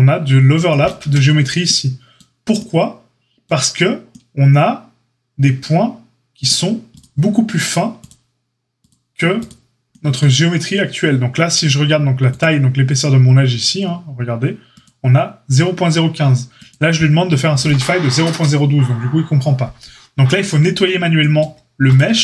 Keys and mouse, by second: 0.9 Tab, 6.8 click, 7.9 click, 9.3 click, 12.4-21.9 drag.